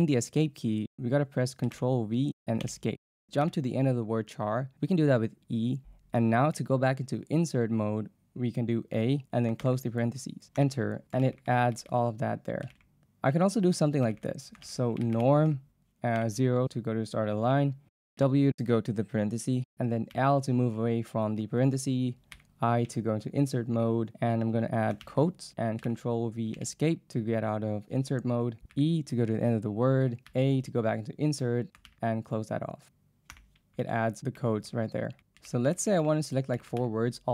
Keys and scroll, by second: 1.7 ctrl+v, 2.7 Escape, 3.5 e, 9.0 a, 9.6 shift+0, 10.6 Return, 13.0-16.2 typing, 18.3 w, 20.1 l, 22.4 i, 25.0 shift+', 25.9 ctrl+v, 26.6 Escape, 28.7 e, 30.5 a, 31.9 shift+', 33.3 Return, 35.5 ctrl+v, 35.6-37.3 typing.